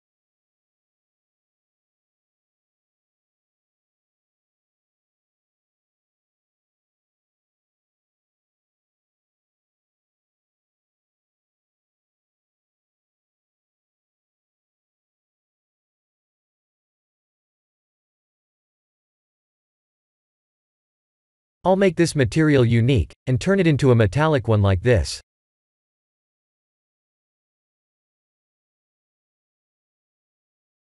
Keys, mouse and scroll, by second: 1.4 click, 4.8 click, 7.1 click, 9.2 KP_7, 10.5 shift+d, 12.0 KP_0, 13.1 r, 14.9 g, 16.8 s, 17.8 g, 25.3 click, 26.7 click, 29.5 click.